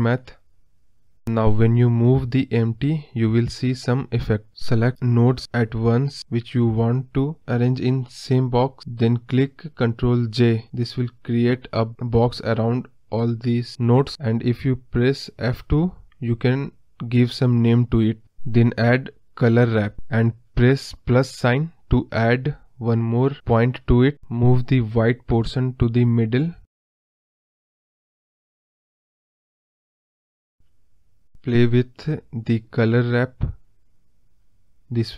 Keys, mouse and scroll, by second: 1.0 g, 5.1 ctrl+z, 10.3 ctrl+j, 22.5-25.8 drag, 25.8 scroll up 2, 26.0-26.7 middle drag, 26.7 scroll up 2, 26.9 middle click, 27.6 scroll up 1, 27.8-29.3 middle drag, 29.3-35.1 drag.